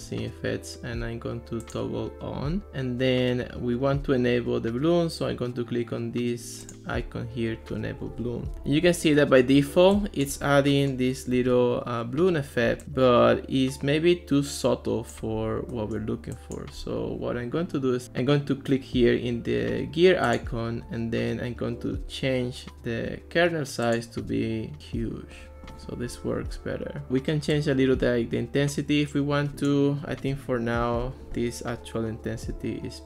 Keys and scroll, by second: 30.3 super+z.